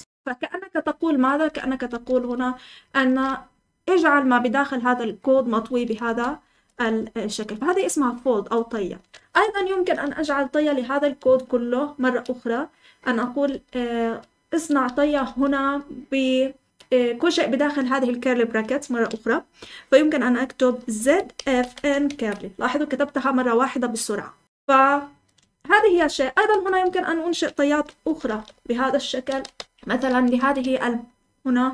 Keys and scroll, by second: 1.1-3.0 typing, 6.0 Escape, 6.2-7.2 typing, 9.1 Escape, 9.1-12.0 typing, 13.4-15.2 typing, 20.7-22.6 typing, 25.7 Escape, 26.5 Escape, 27.6 Escape, 28.0-31.7 typing.